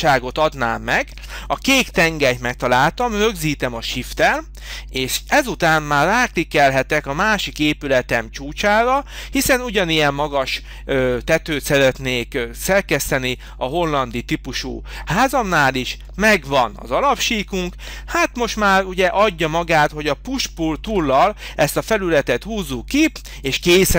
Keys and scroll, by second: 20.8 p.